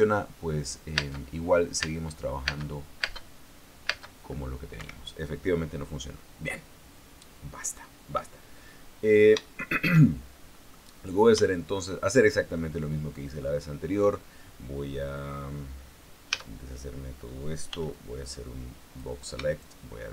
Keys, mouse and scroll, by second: 1.7 space, 2.5 space, 4.6 space, 5.5 Escape, 10.1 shift+middle click, 10.7 shift+scroll down 1, 11.2 middle click, 11.6-12.1 scroll down 1, 12.1 shift+middle click, 12.9-15.6 shift+middle drag, 17.0 a, 18.4 b, 18.6-19.9 drag.